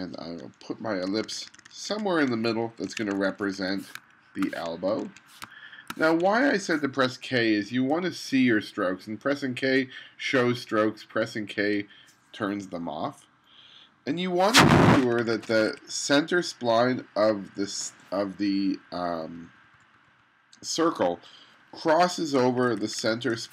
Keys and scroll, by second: 1.1 1, 2.9 2, 4.0 space, 5.0 2, 5.5 space, 6.4 2, 8.0 k, 11.2 k, 11.8 k, 15.1 2, 20.9 Up, 22.4 1.